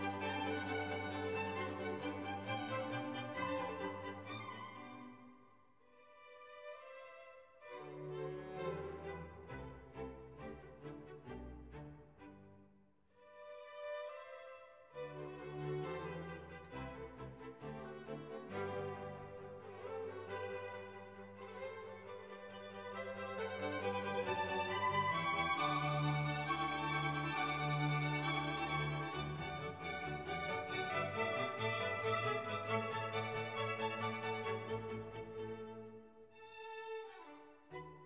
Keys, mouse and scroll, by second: 5.4 click, 10.7 click, 14.0 click, 15.7 Return, 18.9 click, 20.1 click, 21.7 click, 25.4 click, 26.4 click, 27.3 click, 34.1 click, 35.0 click.